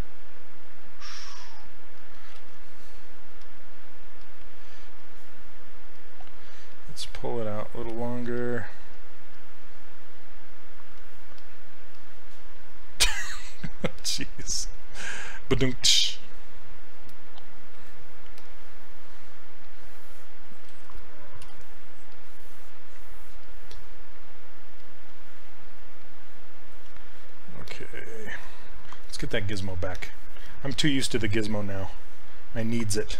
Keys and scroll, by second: 2.5 ctrl+z, 21.5 r.